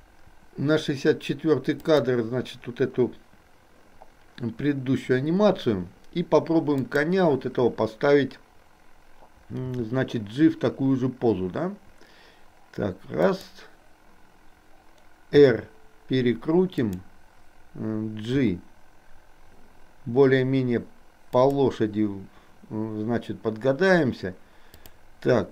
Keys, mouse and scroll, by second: 7.0 click, 9.6 g, 15.4 r, 18.4 g, 24.7 click.